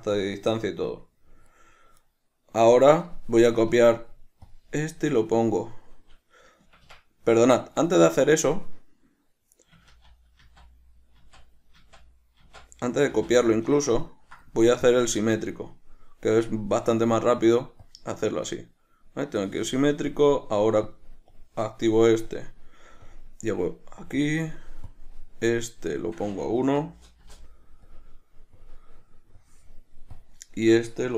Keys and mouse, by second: 2.2 right click, 4.0-15.1 right drag, 7.0 Escape, 15.1-21.2 drag, 21.6-31.1 drag, 27.6 Return.